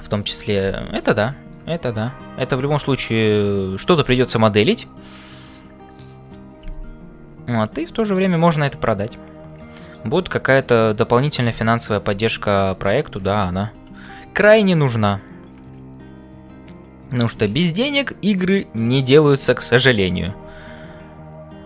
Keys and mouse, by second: 0.0-21.6 typing, 1.7 shift+middle click, 8.0 shift+middle click, 8.3 middle click, 9.5 middle click, 10.5 shift+right click, 17.6 shift+middle click, 18.5 shift+middle click.